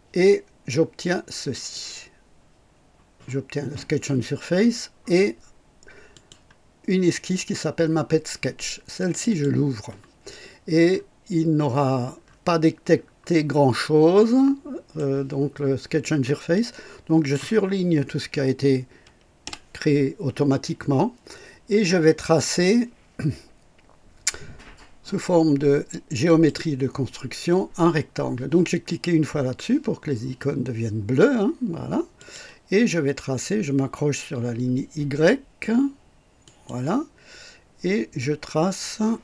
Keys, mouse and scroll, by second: 1.5 click, 6.1 click, 9.1 click, 10.9 scroll up 2, 12.2 scroll up 1, 12.9-13.7 scroll down 4, 14.1-15.1 right drag, 16.5-17.5 drag, 19.4 Delete, 26.2 click, 32.1 click, 36.4 click.